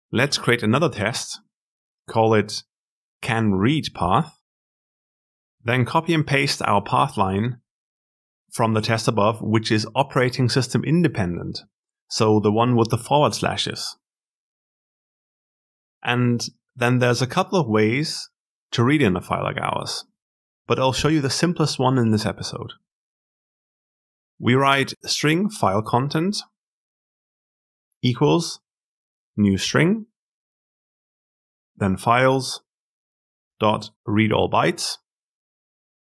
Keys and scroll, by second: 1.7 alt+Insert.